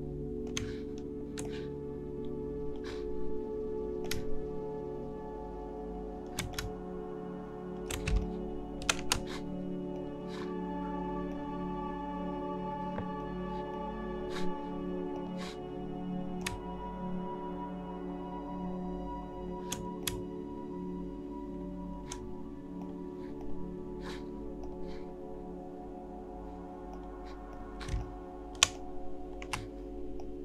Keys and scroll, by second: 8.1 space, 27.9 shift+space.